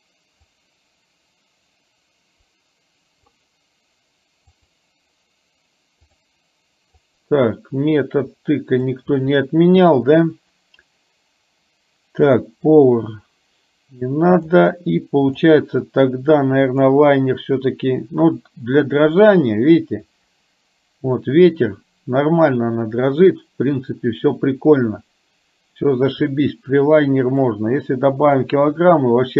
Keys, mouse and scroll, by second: 0.5-3.2 drag, 4.6 click, 6.1 click, 7.1-9.0 drag, 12.4-14.6 drag, 15.5 click, 16.7-18.5 drag, 19.4 middle click, 27.5-28.5 drag.